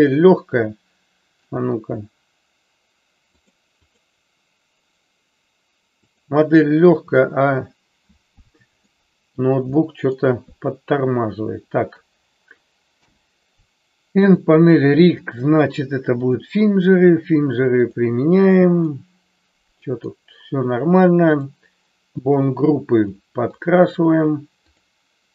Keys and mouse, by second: 8.9 middle click, 9.9 middle click, 13.0 n, 14.2 click, 15.2-16.5 drag, 17.7 click, 18.8-20.1 middle drag, 22.2 click, 23.6 click, 24.7 click.